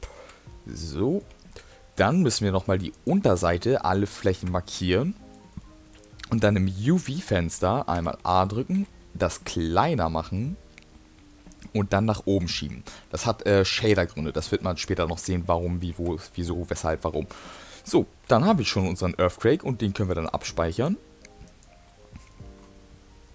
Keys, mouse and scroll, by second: 0.2 Tab, 0.9 middle click, 1.7 middle click, 2.9 click, 4.3 ctrl+click, 4.8 middle click, 5.9 middle click, 8.0 a, 9.0 s, 11.8 g, 14.6 middle click, 15.3 middle click, 16.0 Tab, 16.4 middle click, 18.5 middle click, 20.1 click.